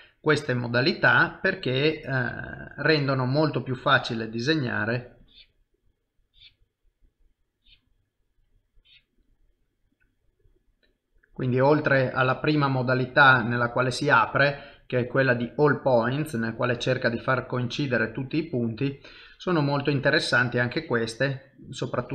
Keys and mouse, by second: 2.1 click, 6.3 click, 7.5 click, 9.9 middle click, 13.2 middle click, 14.6 click.